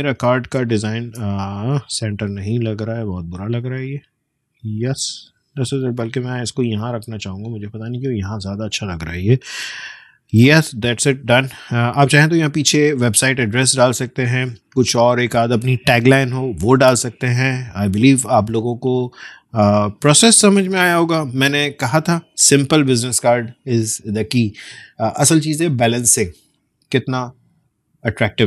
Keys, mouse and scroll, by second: 0.2 space, 0.4 click, 0.6 space, 1.5-2.0 alt+scroll up 1, 2.4-3.8 drag, 4.6 alt+scroll down 1, 6.3 click, 6.3-9.6 drag, 10.5-11.2 alt+scroll up 1, 11.3-11.9 alt+scroll down 1, 17.4 space, 17.5 click, 17.8 space, 18.6-19.0 alt+scroll down 1, 19.3 space, 19.5 click, 19.8 space.